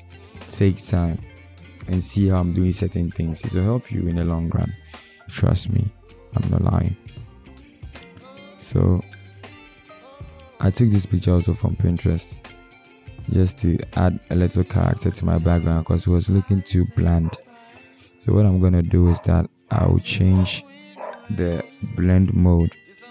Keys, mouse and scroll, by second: 13.6 Return.